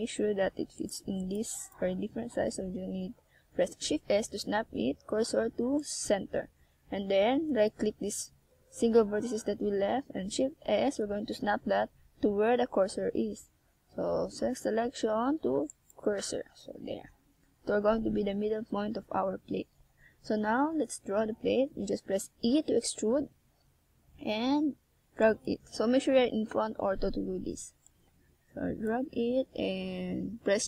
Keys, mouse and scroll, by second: 1.6 click, 1.9 right click, 2.1 g, 4.1 click, 4.5 right click, 5.0 right click, 5.2 g, 6.0 click, 6.1 right click, 6.6 g, 7.5 click, 7.8 right click, 8.0 g, 8.9 click, 9.6 right click, 10.0 g, 10.6 click, 12.7 a, 13.7 right click, 14.2 right click, 14.7 g, 15.5 click, 16.2 right click, 16.7 g, 17.2 click, 17.5 right click, 17.7 g, 18.9 click, 19.3 right click, 20.9 right click, 21.2 g, 22.4 click, 22.7 right click, 23.1 g, 24.4 click, 24.9 right click, 25.2 g, 26.1 click, 26.6 right click, 27.4 g, 28.1 click, 28.4 right click, 28.8 g, 30.0 click, 30.3 right click.